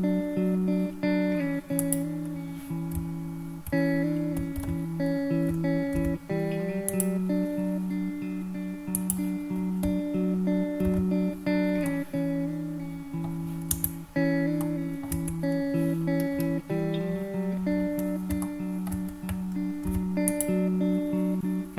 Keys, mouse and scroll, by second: 1.9 click, 3.0 `, 4.0 `, 4.7 alt+z, 6.1 ctrl+r, 9.1 click, 11.0 alt+z, 12.0-13.4 middle drag, 13.9 Tab, 14.7 middle click, 15.2 Tab, 16.3-17.3 scroll up 2, 18.5 shift+middle click, 20.0 ctrl+r.